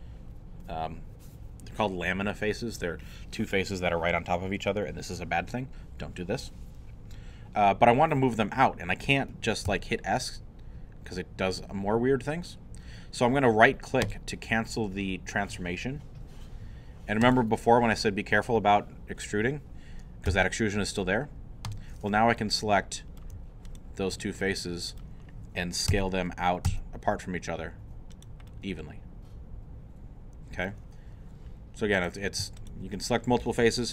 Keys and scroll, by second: 9.7 s, 20.3 g, 25.9 s, 27.5 x.